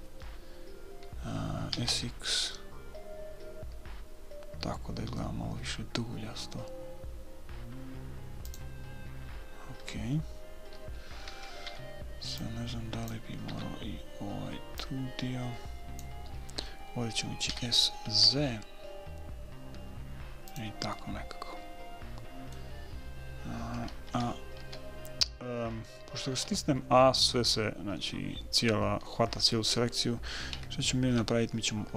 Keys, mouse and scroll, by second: 2.1 s, 11.6 a, 12.1 b, 13.9 b, 17.9 s, 21.3-23.2 middle drag, 24.5 a, 25.0 a, 26.6 a, 26.8 a, 28.3-30.3 middle drag, 30.9 a.